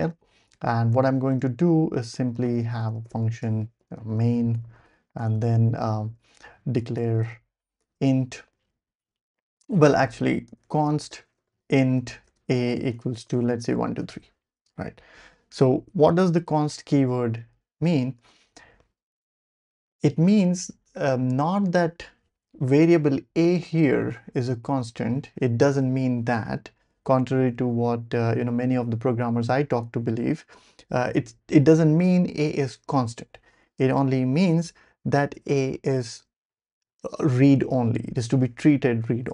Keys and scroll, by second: 1.3-4.6 typing, 4.9 Left, 5.2 Return, 5.3 Return, 6.1 Up, 6.1-7.6 typing, 6.2 Tab, 9.7-15.5 typing, 18.2 Escape.